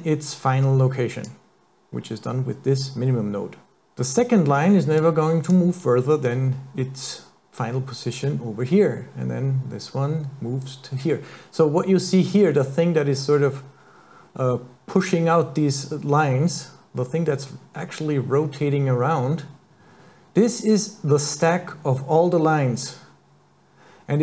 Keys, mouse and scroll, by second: 5.0 click.